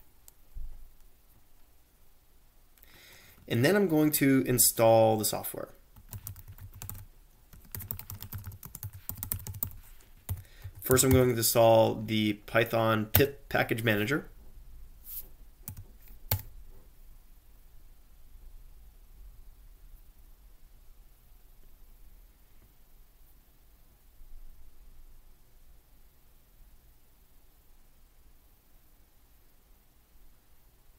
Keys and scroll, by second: 0.0-0.2 typing, 5.7-11.6 typing, 12.9-13.6 typing, 15.4-16.2 typing, 16.3 Return.